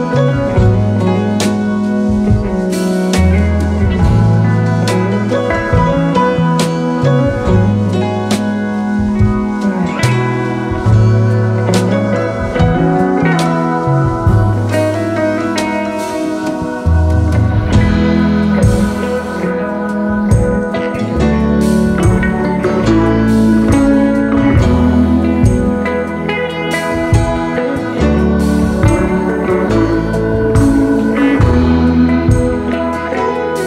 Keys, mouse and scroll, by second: 2.1 double click, 5.6 alt+scroll up 1, 5.9 space, 13.6 ctrl+a, 14.6 Return, 17.1 shift+click, 17.6 alt+click, 18.7 double click, 20.4 ctrl+c, 20.8 ctrl+f, 23.4 ctrl+a, 23.7-24.6 typing, 26.3 shift+click, 26.8 alt+click, 28.2 alt+click, 28.2 double click, 29.1 space.